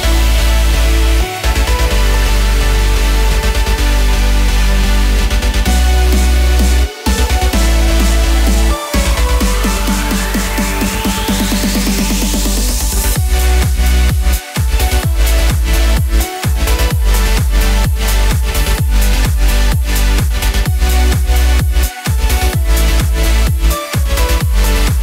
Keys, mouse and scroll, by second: 18.3 ctrl+s, 19.0 click, 19.3 click.